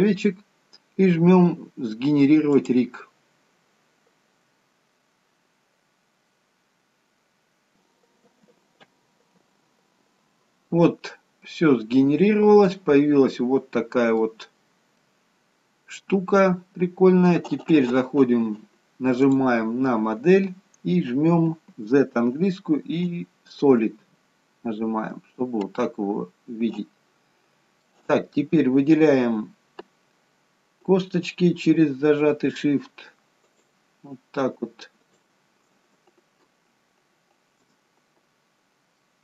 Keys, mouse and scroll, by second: 2.4 click, 8.7-11.0 scroll down 2, 11.0-11.6 scroll down 1, 11.6 middle click, 14.6 scroll up 1, 14.9 middle click, 19.1 click, 21.7 z, 24.8 scroll down 1, 25.1 middle click, 33.4 shift+click, 35.0 shift+click, 38.9 middle click.